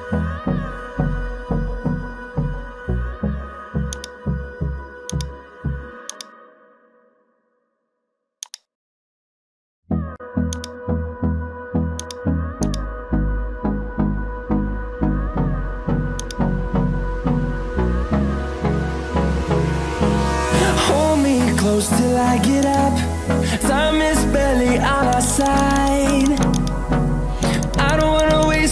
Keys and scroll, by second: 23.8 ctrl+z.